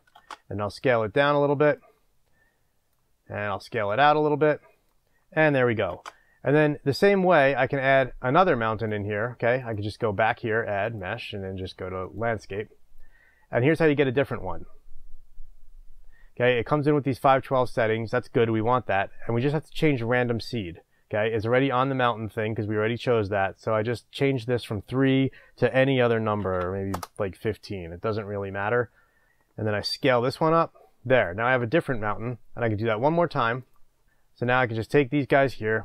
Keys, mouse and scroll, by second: 0.9 shift+space, 1.8-21.8 drag, 7.3 shift+space, 29.3 Return, 29.7-32.0 drag, 29.7 s, 34.0-35.8 middle drag, 34.6 scroll, 34.8-35.6 scroll down 2, 35.6-35.8 scroll down 1.